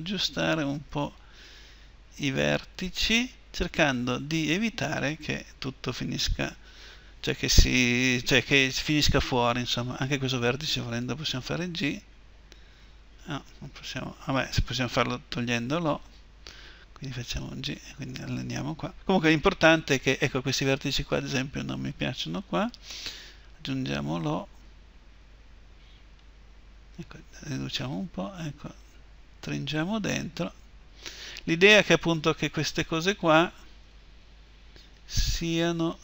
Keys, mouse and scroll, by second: 10.1-12.2 right drag, 11.1 g, 16.3 o, 20.9-25.0 right drag, 25.0 o, 25.0 g, 32.8 middle click, 33.6-35.8 right drag, 33.6 g, 35.8-36.0 middle drag.